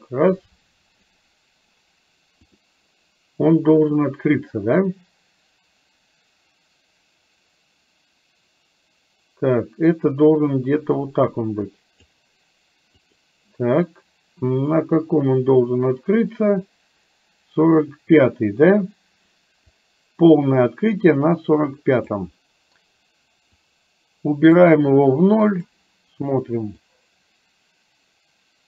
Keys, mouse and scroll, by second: 4.0-12.1 drag, 15.1-18.3 drag, 19.7-22.3 drag, 23.7-24.7 drag, 25.5 click, 27.0-28.6 drag.